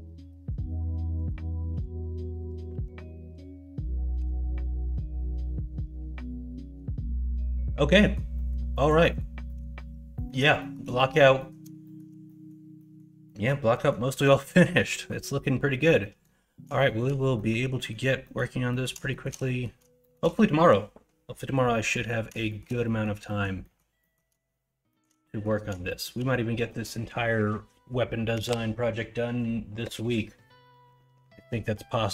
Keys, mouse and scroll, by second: 0.2 middle drag, 1.7 h, 2.7 ctrl+z, 4.1 h, 4.6 middle drag, 5.5 middle drag, 5.8-6.2 middle drag, 6.5 middle drag, 7.1 middle drag, 7.5 middle drag, 7.9 middle drag, 8.3 middle drag, 8.7 middle drag, 9.0 middle drag, 9.4 middle drag, 10.1 middle drag, 10.5 shift+middle drag, 10.9 middle drag, 11.3 middle drag, 11.8 shift+middle drag, 12.2 middle drag, 12.7 middle drag, 13.2 middle drag, 13.7 middle drag, 14.1 middle drag, 14.5 middle drag, 14.9 middle drag, 16.0 middle drag, 16.8 shift+middle drag, 17.3 middle drag, 17.7 middle drag, 18.2 middle drag, 18.6 middle click, 19.1 shift+middle drag, 19.4 middle drag, 20.0 shift+middle drag, 21.9 middle drag, 22.4 shift+middle drag, 22.8 middle drag, 23.2 middle drag, 23.6 middle drag, 24.0 middle drag, 24.8 shift+middle drag, 25.2 middle drag, 25.8 shift+middle drag.